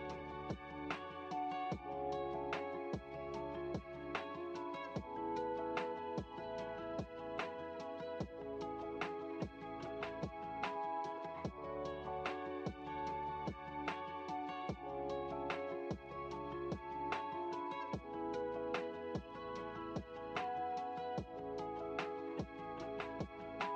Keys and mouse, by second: 6.6 middle click, 8.6-11.2 drag, 11.9-14.7 drag, 15.4-19.5 middle drag.